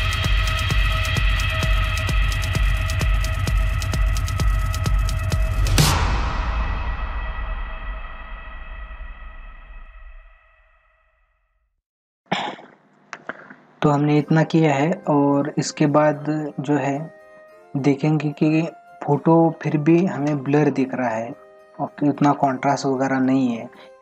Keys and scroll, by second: 0.5 space, 6.6 ctrl+=, 7.5 ctrl+=, 7.7 space, 10.6 ctrl+alt+z, 11.8 ctrl+=.